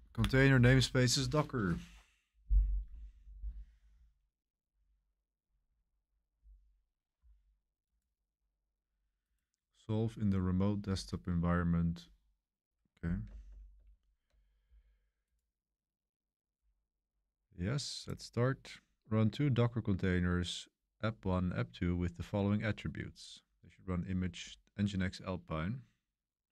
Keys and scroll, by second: 13.2 super+=, 13.4 super+=, 13.7 super+=.